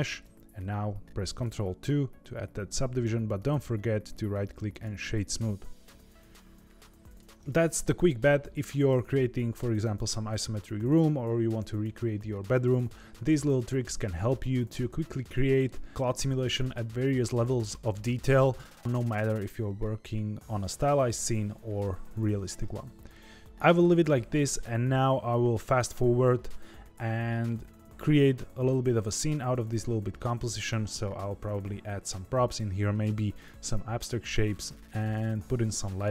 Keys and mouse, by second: 1.5 ctrl+2, 3.3-4.9 right drag, 6.3-7.1 middle drag, 22.3-23.8 middle drag.